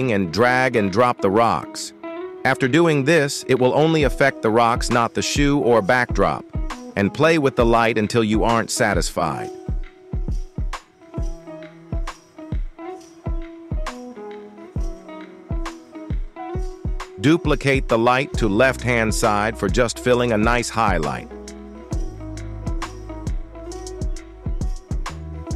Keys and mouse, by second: 0.4 click, 1.1-3.9 drag, 4.7 shift+middle drag, 6.1 shift+middle click, 7.5 shift+middle click, 10.4 g, 12.2 z, 12.3 z, 12.4 z, 13.8-14.1 middle drag, 14.5-14.9 shift+middle drag, 16.4 shift+d, 18.2 y, 18.2 y, 18.7 g, 21.4 z, 21.5 z, 21.6 z, 21.6 z, 21.9-22.2 middle drag, 22.5-22.8 shift+middle drag, 23.0 g, 23.9 x, 24.0 x, 24.0 x, 24.5 shift+middle drag.